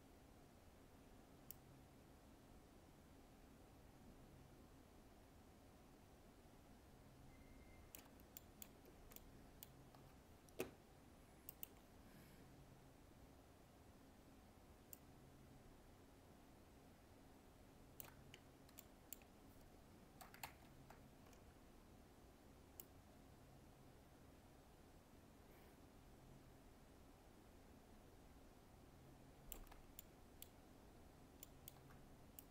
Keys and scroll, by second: 20.4 ctrl+z.